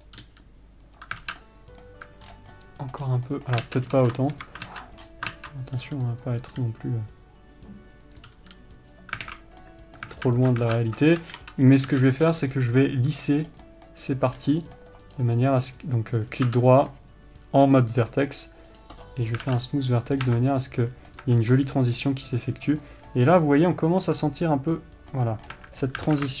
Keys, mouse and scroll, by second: 0.6 g, 1.6 alt+z, 1.8-6.8 middle drag, 2.6 scroll down 1, 3.4 scroll down 2, 4.0 ctrl+z, 4.7 KP_3, 5.1 ctrl+z, 5.4 scroll up 2, 5.7 ctrl+z, 6.2 g, 6.8 r, 8.7 g, 9.6 alt+a, 10.0-16.9 middle drag, 10.5 alt+z, 11.1 z, 11.7 3, 12.0-13.1 scroll up 1, 13.1 c, 14.7 scroll down 1, 16.9-19.9 right drag, 16.9 1, 19.6 scroll down 1, 19.8 alt+a, 19.9-26.4 middle drag, 20.6 scroll up 2, 21.6 Tab, 22.0-22.4 scroll up 2, 25.8 scroll down 2, 25.9 Tab, 26.2 scroll up 2.